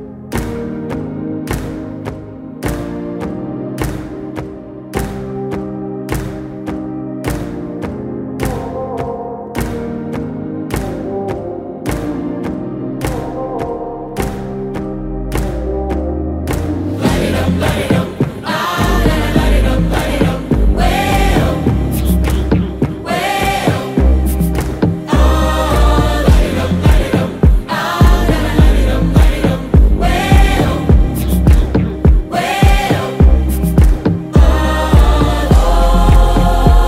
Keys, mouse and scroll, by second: 0.5-3.3 drag, 18.0-23.6 drag, 30.2 click, 30.2 click, 35.9 click.